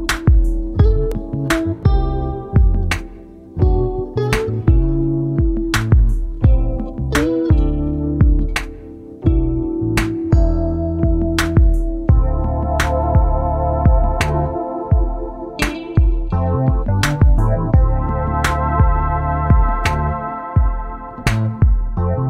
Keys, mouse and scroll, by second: 0.0 ctrl+c, 0.6 ctrl+click, 1.4 ctrl+v, 2.4-2.9 ctrl+scroll down 2, 4.0 KP_5, 5.8 shift+click, 7.2 click, 8.2 click, 8.8 click, 9.4 click, 10.3 click, 11.4-14.3 ctrl+drag, 15.0 click, 15.9 ctrl+scroll up 2, 16.8 Up, 20.8 click.